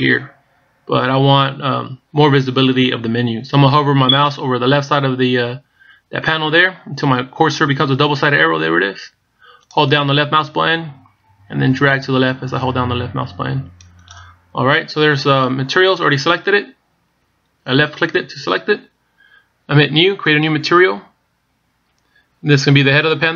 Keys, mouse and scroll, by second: 10.4 click, 16.5 click, 17.2-17.6 scroll down 3, 17.6-18.4 scroll up 6, 21.1 click.